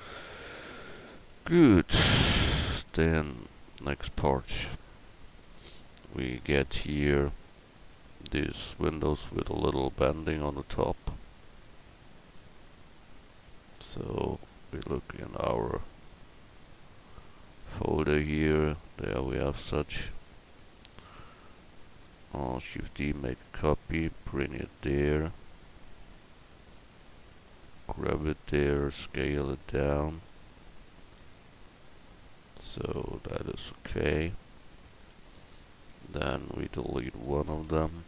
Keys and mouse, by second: 0.5 Tab, 5.0 KP_1, 22.6 shift+d, 27.6 g, 28.8 s, 31.2 g, 35.3 middle drag, 35.9 Tab, 37.3 l.